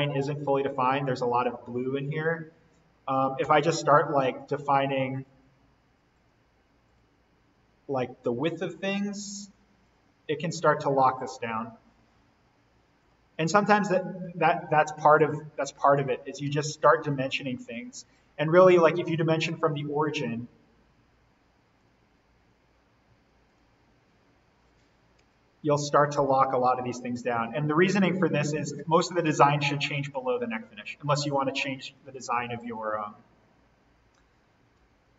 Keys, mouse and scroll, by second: 0.3-2.0 scroll down 1, 3.4 d, 4.0 click, 13.6 scroll down 1, 15.5 Escape, 16.7 typing, 17.6 click, 25.2 Escape, 26.1 d, 27.2 click, 33.4-34.0 scroll down 1, 34.2-34.7 typing.